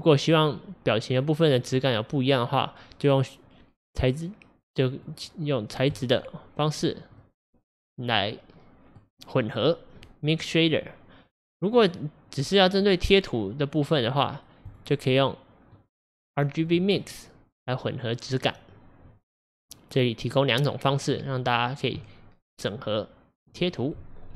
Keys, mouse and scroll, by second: 6.1 click, 7.2-10.0 middle drag, 10.0-12.8 drag, 14.8 click, 15.8-17.1 drag, 17.1-21.4 middle drag, 21.4-22.1 scroll down 2, 22.1-24.3 middle drag.